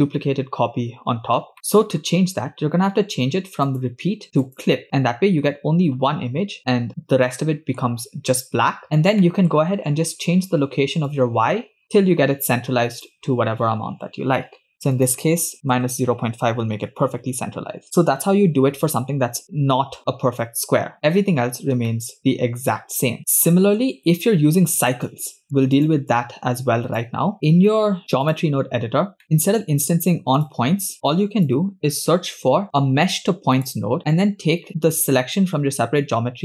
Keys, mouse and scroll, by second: 1.5-2.1 middle drag, 2.1 scroll down 1, 3.6-4.8 drag, 6.3 scroll up 2, 6.6 shift+middle click, 6.6 scroll down 2, 8.6-8.9 scroll down 2, 9.2 middle click, 11.1-13.1 shift+drag, 14.9 click, 17.6-19.9 scroll down 4, 21.1-21.6 scroll up 5, 22.0 shift+middle click, 22.2-22.5 scroll up 3, 23.3 scroll down 10, 23.5-23.9 middle drag, 24.2 click, 25.7 click, 26.1-27.0 drag, 27.3-28.5 drag, 27.3 scroll up 1, 29.1 scroll down 2, 29.3 middle click, 29.3 scroll up 5, 29.5 click, 30.4 click, 30.9-31.5 drag, 31.8 scroll down 1, 32.4 shift+a, 34.0 middle click, 34.8 scroll up 2.